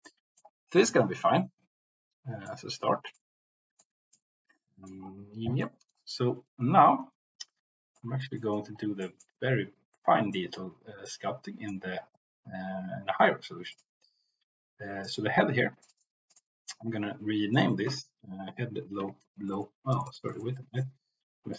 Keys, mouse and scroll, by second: 0.1 middle click, 0.9-2.6 middle drag, 3.1-3.9 middle drag, 4.1-4.9 middle drag, 5.5 middle click, 7.8-8.3 shift+middle drag, 8.5 middle click, 9.0 middle click, 10.3-11.7 middle drag, 13.7 click, 15.0 click, 16.1-21.3 drag, 19.5 BackSpace, 19.9 BackSpace, 20.2 BackSpace.